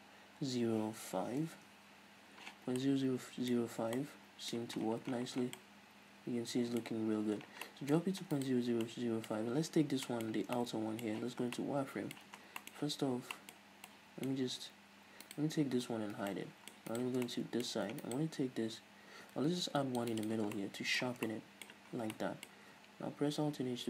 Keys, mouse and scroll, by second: 1.9 Return, 3.0-8.7 middle drag, 3.8 scroll up 2, 4.1 a, 4.8 a, 5.1-5.8 scroll down 2, 7.1-7.9 scroll up 2, 8.7 right click, 9.1-15.6 middle drag, 10.6 Tab, 11.5 z, 12.6 Tab, 12.6 scroll down 2, 13.1 z, 13.8 scroll up 2, 14.7-15.6 scroll up 2, 15.6 right click, 16.4 h, 16.6-17.2 middle drag, 17.2 right click, 17.3 Tab, 17.5 middle click, 18.3 alt+right click, 19.9 ctrl+r, 20.5 click, 20.6 right click, 20.8-23.8 middle drag, 21.3 Tab, 22.2 scroll down 2.